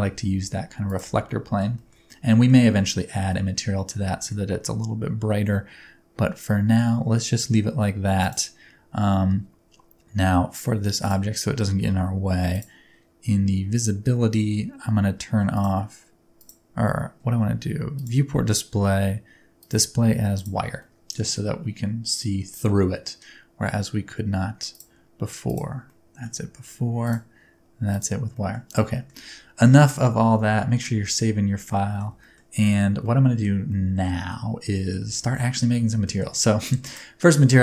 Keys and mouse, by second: 0.0 Tab, 0.2 s, 0.9 click, 1.1 Tab, 1.3-1.6 middle drag, 1.8 shift+middle click, 2.1-2.5 middle drag, 2.7 middle click, 3.3-3.9 middle drag, 4.2 shift+middle drag, 15.5 click, 16.4 click, 18.0 click, 19.6-20.4 drag, 20.8 middle click, 21.4-23.0 middle drag, 24.7-25.6 drag, 25.9-26.2 middle drag, 27.1-28.0 drag, 28.3 middle drag, 28.9 shift+middle click, 29.9 shift+middle click, 30.4 ctrl+s, 31.0 middle click, 31.6-32.0 middle drag, 32.2 middle drag, 33.0-33.4 shift+middle drag, 33.7-34.1 shift+middle drag, 34.3-34.9 middle drag, 35.2 shift+middle drag, 36.0 shift+middle drag, 36.8 click.